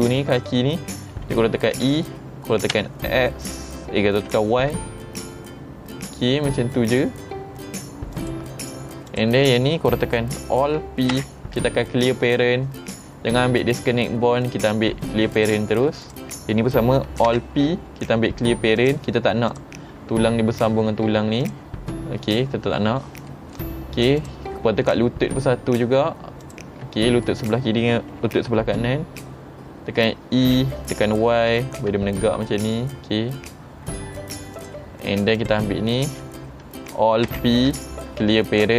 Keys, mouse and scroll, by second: 1.9 e, 8.2 click, 9.2 click, 11.2 alt+p, 15.4 click, 16.1 click, 17.4 alt+p, 18.8 click, 19.6 click, 21.5 click, 23.0 middle click, 23.0-23.4 scroll down 2, 24.3 click, 24.7 middle click, 24.8 scroll up 2, 26.5 shift+click, 27.1 middle click, 29.7 middle click, 29.8-30.5 scroll down 1, 30.5 e, 34.6 click, 35.4 click, 37.4 alt+p.